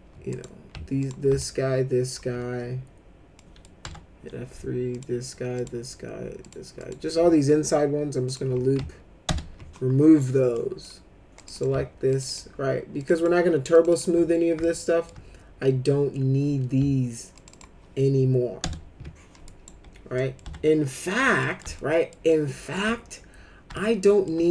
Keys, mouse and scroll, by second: 0.3 click, 1.0 ctrl+click, 1.4 alt+middle click, 3.4 middle click, 3.8 F3, 4.9 ctrl+click, 5.5 ctrl+click, 6.4 ctrl+click, 6.8 ctrl+click, 8.2 click, 9.2 ctrl+BackSpace, 10.5 middle click, 11.3 click, 11.5 click, 12.1 ctrl+click, 12.2 ctrl+click, 13.0 ctrl+click, 13.1 ctrl+click, 13.7 ctrl+click, 13.9 ctrl+click, 14.6 alt+middle click, 17.3 ctrl+click, 17.5 ctrl+click, 18.6 ctrl+BackSpace, 19.4 right click, 20.2 middle click, 20.4 F3, 20.8 middle click, 21.4 middle click, 21.8 alt+middle click, 22.3 alt+middle click, 23.7 alt+middle click.